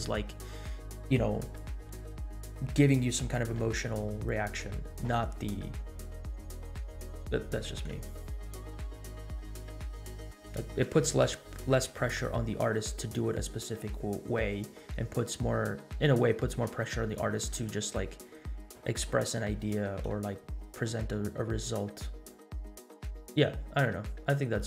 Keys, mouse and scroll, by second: 1.8 click, 8.1 space.